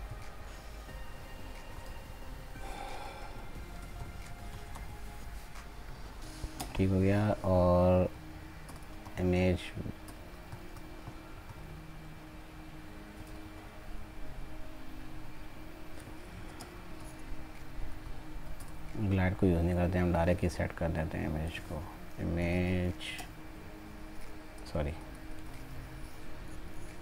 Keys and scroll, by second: 17.9 ctrl+z.